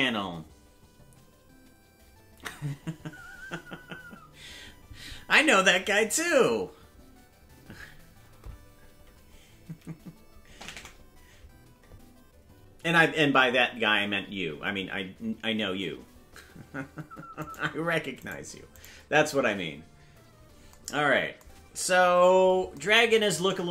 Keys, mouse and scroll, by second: 10.5 KP_0, 20.7 right click, 22.1 KP_Decimal.